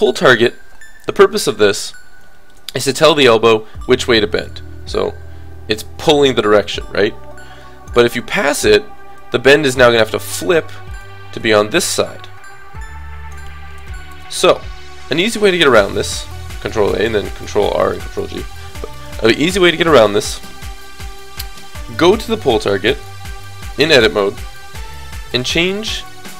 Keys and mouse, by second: 4.4-6.0 middle drag, 8.4-13.4 drag, 9.2-10.3 middle drag, 9.2 right click, 11.4-12.7 right drag, 13.9 alt+r, 14.2 alt+g, 15.5 a, 15.6 a, 16.2 alt+r, 17.8 alt+g, 19.0-20.8 drag, 21.8-26.3 drag, 22.9 right click, 23.5 middle click.